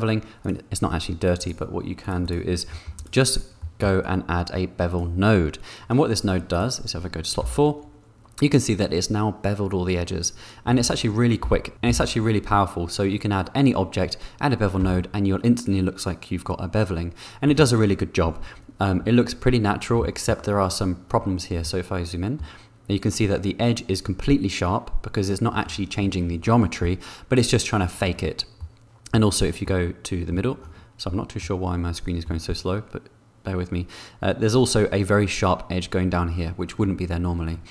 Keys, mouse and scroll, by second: 0.4 click, 1.4 click, 2.0 click, 2.2 click, 2.7 click, 3.7 click, 4.0-5.1 drag, 6.5 click, 7.7 4, 11.1 5, 11.7 4, 12.1 5, 15.1 4, 21.6-22.8 middle drag, 28.9 middle click, 30.1 middle click, 31.9 middle click.